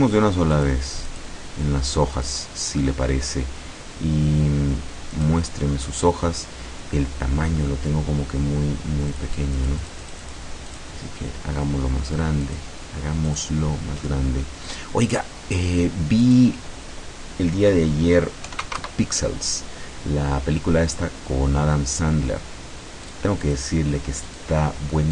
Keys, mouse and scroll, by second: 0.6 click, 1.1 click, 2.2 click, 5.2 click, 9.1 click, 9.6 click, 10.7 click, 12.5 click, 13.3 click, 14.8 click, 15.2 click, 16.3 click, 18.5 KP_5, 18.9 KP_Enter, 23.1 click, 23.5 click, 24.3 click.